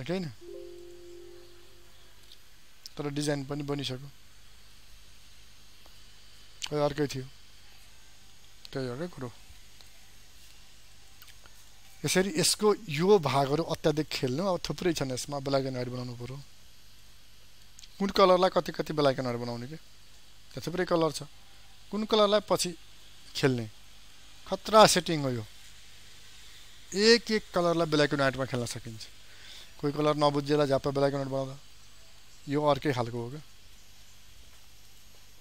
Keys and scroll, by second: 2.8 ctrl+0.